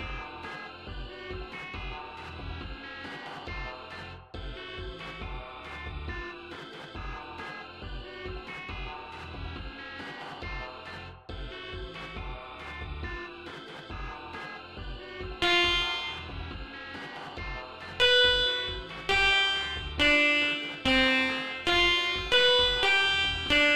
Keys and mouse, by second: 15.3 click, 16.4 click, 17.9 click, 19.0 click, 19.9 click, 20.8 click, 21.6 click, 22.2 click, 22.7 click, 23.4 click.